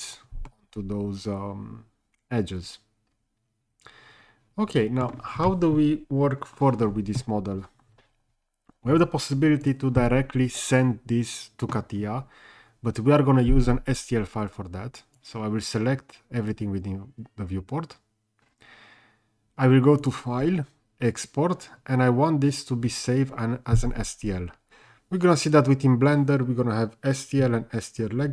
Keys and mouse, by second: 0.5-5.0 middle drag, 9.6 click, 15.2-16.5 drag, 20.0-28.3 drag.